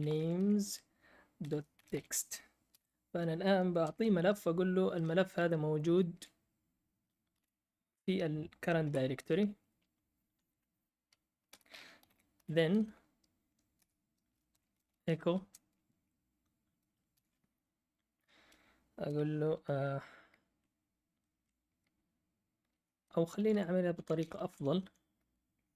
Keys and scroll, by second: 0.0-4.3 typing, 5.3-6.1 Left, 7.0-7.8 typing, 8.8-10.3 End, 9.3 Right, 11.4 Return, 11.7-12.9 typing, 13.8 Return, 14.2-15.4 typing, 16.9-17.6 typing, 23.9 Up, 23.9 Right, 24.1 Right, 24.3 Right, 24.5 Right.